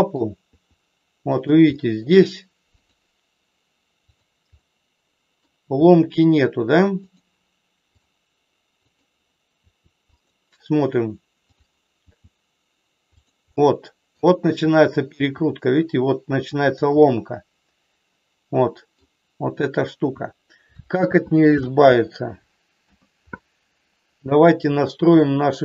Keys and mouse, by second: 0.4 r, 1.3 click, 1.8 middle click, 2.7 click, 4.2 click, 4.5 middle click, 5.7 r, 7.0 click, 8.8 click, 9.5 r, 10.2 click, 12.0 r, 13.5 middle click, 15.2 r, 16.5 click, 17.0-18.9 middle drag, 21.0 ctrl+z, 21.7 ctrl+z, 22.8 KP_1.